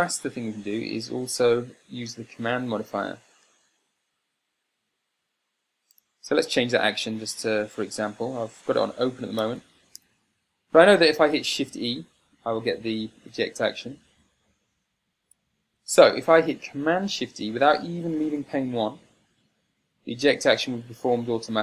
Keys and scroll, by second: 1.1 Tab, 6.4 Tab, 7.4 o, 9.8 Tab, 13.3 shift+e, 15.0 o, 16.0 Tab.